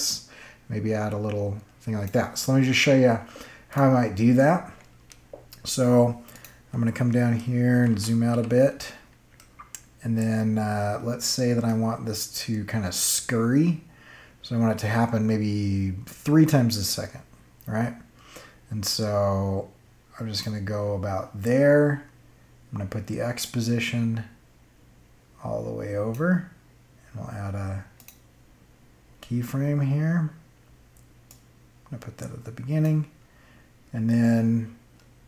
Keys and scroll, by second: 7.7 -.